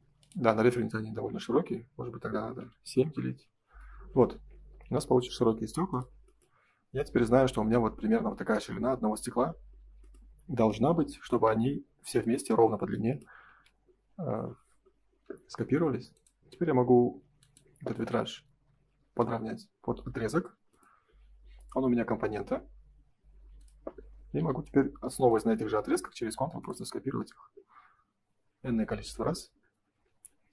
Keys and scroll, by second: 3.0 Return, 3.8 space, 4.8 ctrl+s, 13.4 ctrl+s, 19.4 space, 20.1 ctrl+s, 24.3 m, 30.3 F3.